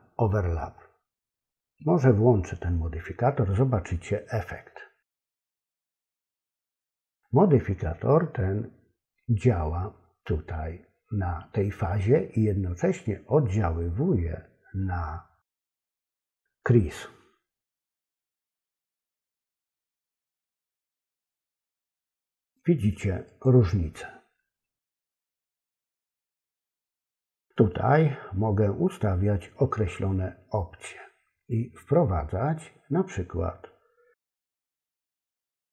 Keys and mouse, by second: 5.2 click, 6.5 click, 7.0 click, 21.1 click, 21.8 click, 22.4 click, 23.3 click, 34.8 click.